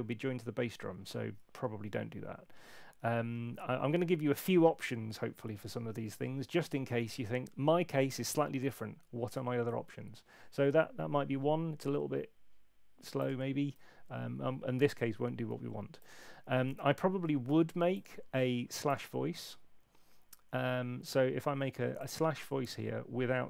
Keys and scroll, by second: 16.2 super+1.